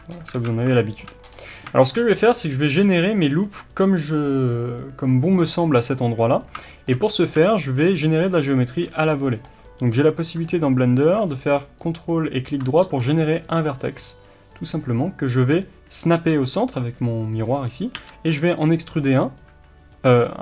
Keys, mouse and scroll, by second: 0.1 scroll up 1, 0.3 alt+a, 0.8-9.5 shift+middle drag, 1.2-1.8 scroll up 1, 2.6-3.0 scroll up 1, 7.0-8.3 scroll up 1, 9.5 ctrl+click, 11.9 ctrl+right click, 12.8 g, 17.4 click, 17.9 e.